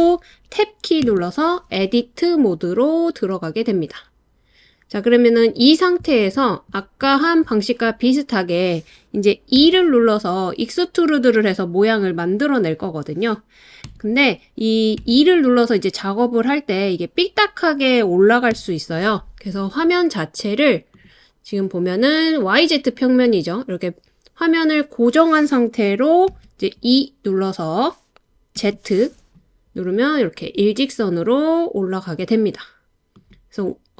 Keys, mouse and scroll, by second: 1.0 Tab, 9.6 e, 13.9 Escape, 15.0 e, 18.5 Escape, 26.3 e, 28.6 z, 33.1 click.